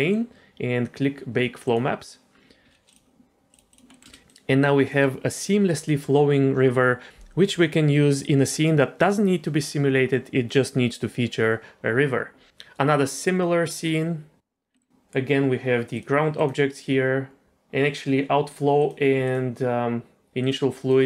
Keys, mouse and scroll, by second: 1.6 click, 2.9 click, 3.5 click, 3.9 middle click, 4.0 space, 4.3 click, 4.9 middle click, 7.1 space, 13.1 middle click, 14.7 middle click, 16.3 click, 17.4 shift+middle click, 17.4-18.0 scroll down 2, 18.8 click, 19.2 click, 20.4 click, 20.8 click.